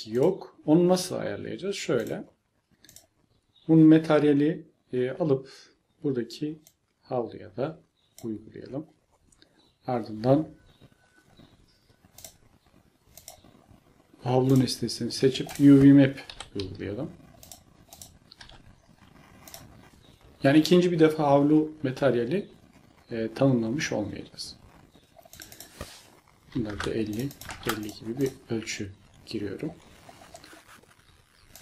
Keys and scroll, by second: 16.3 u, 18.4 u, 26.3-28.9 typing.